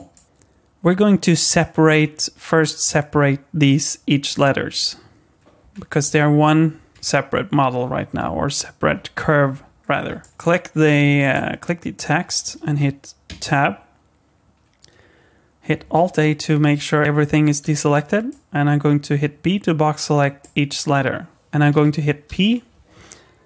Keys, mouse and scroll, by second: 0.1 shift+middle click, 5.6 Tab, 6.0 Tab, 6.9 Tab, 8.9 KP_1, 9.8-10.1 scroll up 3, 10.2 shift+middle click, 10.3 Tab, 10.3 click, 11.2 click, 13.3 Tab, 15.9 alt+a, 17.6 b, 22.3 p.